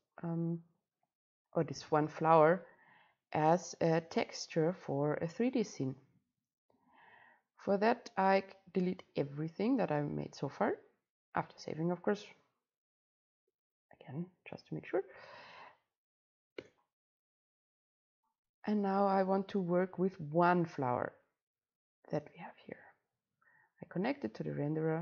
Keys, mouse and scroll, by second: 0.0-1.1 right drag, 1.1-3.2 middle drag, 1.1-2.1 scroll down 2, 2.1-3.2 scroll down 1, 4.8-7.5 right drag, 10.2 click, 13.2 click, 13.8 ctrl+s, 15.5-16.8 drag, 16.8 Delete, 18.6-20.7 drag, 21.7-25.0 drag.